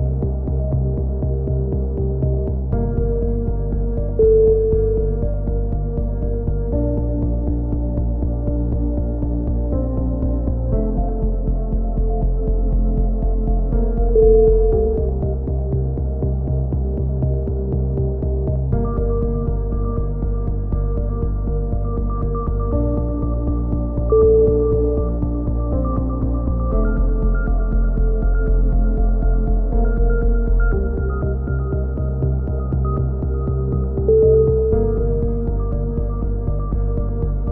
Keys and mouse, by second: 1.5 z, 2.1-3.2 middle drag, 3.0 z, 3.4 a, 3.8 z, 4.1 middle click, 4.3 z, 5.4 click, 6.1 z, 6.3 middle click, 6.9 middle click, 7.7-9.1 middle drag, 9.1 click, 11.2 e, 12.1 click, 12.7 KP_7, 13.8 KP_7, 15.4 KP_7, 19.0 ctrl+KP_7, 19.6 z, 19.9-20.9 drag, 21.1 click, 22.7 middle click, 23.5 click, 25.2-26.2 drag, 27.8 z, 28.1 click, 31.6-33.0 drag, 33.4-34.4 middle drag, 34.4 z, 34.7 click, 34.9 z, 35.7 click, 36.5 click.